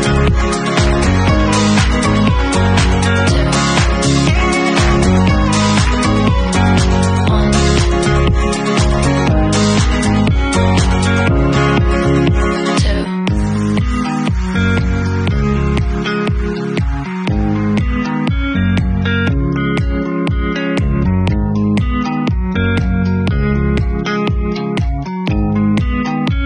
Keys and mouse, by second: 1.2-4.5 middle drag, 4.5 shift+a, 7.3 r, 7.9-21.5 drag, 10.4 ctrl+shift+f, 12.4 w, 14.6 r, 17.4 w, 18.7 Tab, 19.6 shift+q, 21.5 middle click, 22.3-26.4 drag, 23.4 shift+z, 26.1 shift+z.